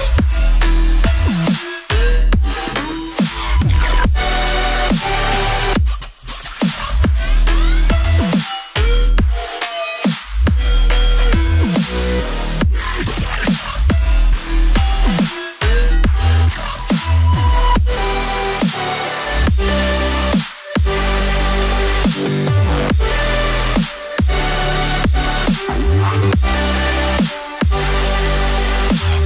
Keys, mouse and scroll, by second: 0.5 right click, 5.5 ctrl+a, 7.1-8.7 typing, 11.1 double click, 16.9 ctrl+click, 21.3 right click, 23.0 right click, 25.7-27.1 ctrl+scroll down 1, 27.4 ctrl+z, 29.0 ctrl+y.